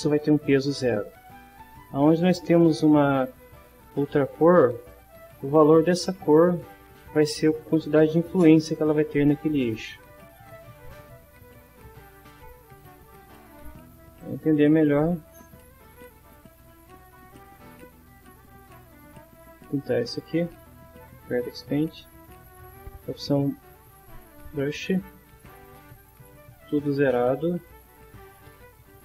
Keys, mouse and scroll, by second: 4.9 click, 14.2 click, 14.9 click, 15.4 shift+middle click, 16.5 shift+a, 18.1 click, 19.5 click, 21.1 click, 22.3 click, 24.7 click, 26.0 click, 27.8-29.0 drag.